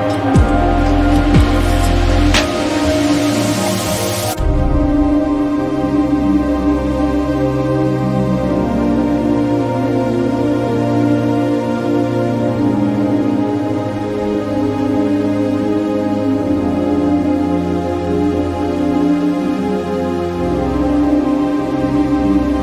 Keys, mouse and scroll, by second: 1.5-4.0 drag, 6.1 Up, 7.9 Right, 11.0 click, 13.6 click, 17.4-22.6 drag.